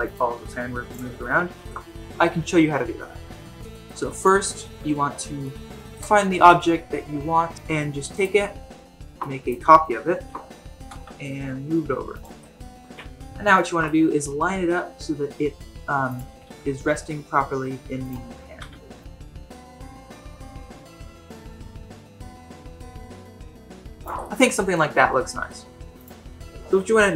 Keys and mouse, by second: 0.1 click, 0.3 g, 1.2 shift+middle drag, 1.6 ctrl+Tab, 3.7 shift+middle drag, 4.1 middle drag, 5.4-6.0 shift+middle drag, 8.1 click, 9.3 drag, 10.1 shift+d, 12.4-12.8 shift+middle drag, 12.8 KP_Decimal, 12.8 KP_1, 13.5-13.8 shift+middle drag, 14.2 g, 16.2 r, 18.5-22.3 typing, 19.2 middle click, 19.4 middle click, 19.8 middle click, 20.4 middle drag, 20.8 middle click, 21.1-21.5 middle drag, 21.8 middle click, 22.5-23.4 middle drag, 23.5 shift+middle click, 23.7 r, 24.2-24.8 middle drag, 25.5-25.9 middle drag, 26.0 click.